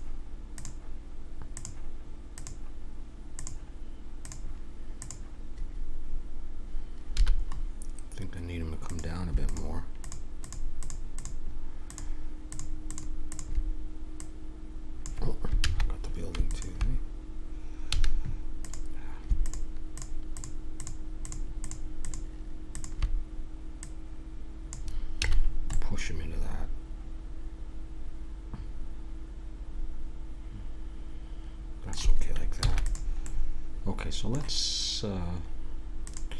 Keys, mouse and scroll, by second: 5.1-6.8 drag, 7.2 a, 7.5-8.8 middle drag, 8.8 right click, 15.6 ctrl+z, 17.9 a, 25.2 a, 25.6 middle click, 26.7-28.5 middle drag, 28.7-29.7 middle drag, 29.9 middle click, 31.0 middle click, 32.6 ctrl+s, 33.2-35.8 middle drag, 36.0-36.3 drag.